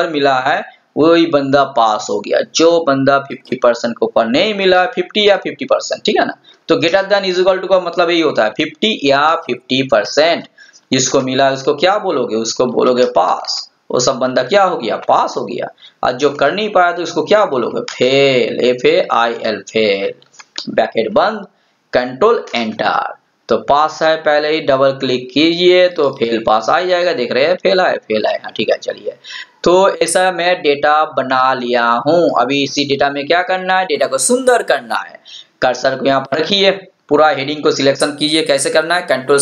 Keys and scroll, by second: 22.5 ctrl+Return.